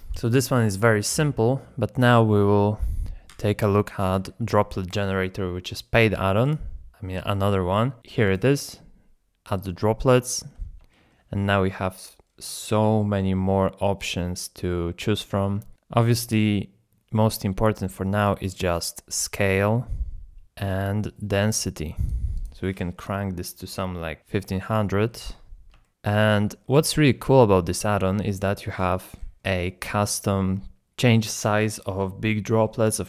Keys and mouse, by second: 0.0 shift+click, 3.3 x, 4.1 n, 6.5 click, 8.2 click, 9.7-10.3 drag, 10.9 shift+middle drag, 15.7-19.6 shift+drag, 20.7-22.1 drag, 23.1-25.3 drag, 25.0 KP_0, 25.3-25.7 shift+middle drag, 25.8 middle drag, 27.0 middle drag, 30.1-31.1 middle drag.